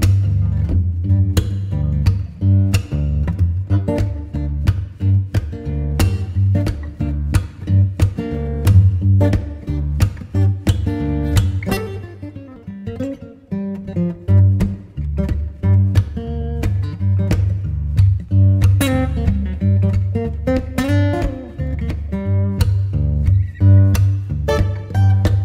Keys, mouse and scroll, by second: 2.8 click, 7.7 click, 14.1 click, 16.5 click, 19.6-21.3 drag, 22.0 click, 24.7 click.